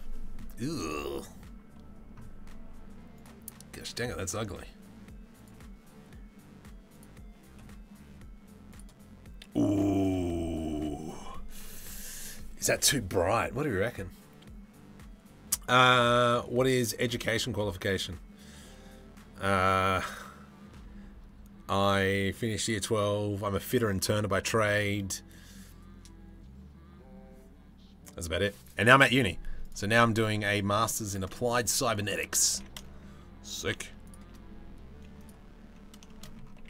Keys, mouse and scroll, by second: 4.9-6.7 drag, 8.3 click, 9.5 middle click, 29.2 click, 29.8 middle click, 30.2 Tab, 30.6 a, 32.0 g, 35.6 shift+middle click, 36.1 g.